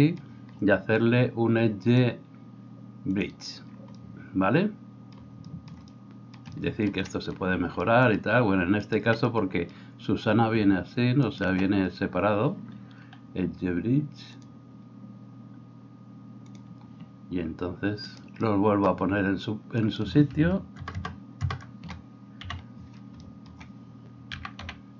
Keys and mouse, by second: 1.8-16.8 drag, 11.2 alt+shift+right click, 18.1 click, 18.1 middle click, 18.1 right click, 19.8 shift+click, 19.8 shift+middle click, 19.8 shift+right click, 20.8 ctrl+KP_Add, 21.5 ctrl+KP_Add, 22.4 KP_3, 24.3 g.